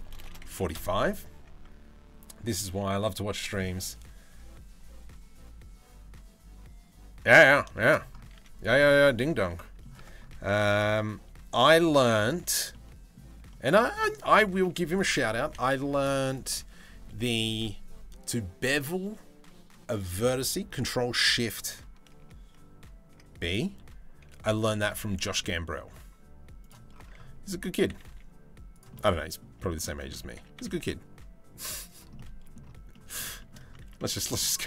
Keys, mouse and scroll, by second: 7.3 shift+middle click, 7.9 z, 9.1-9.4 middle drag, 9.5 Tab, 10.1 s, 12.3-13.6 middle drag, 24.2 s, 28.5 middle click, 29.3 shift+middle click, 29.9 s, 31.7 middle click, 32.5 middle click, 33.0 shift+middle click, 33.5 middle click, 34.2 z.